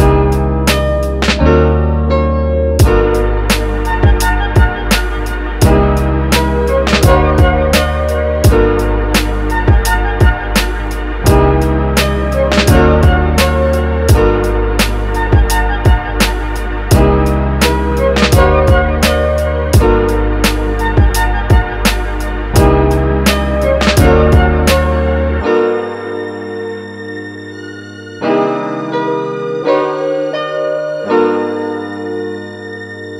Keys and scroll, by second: 14.1 space.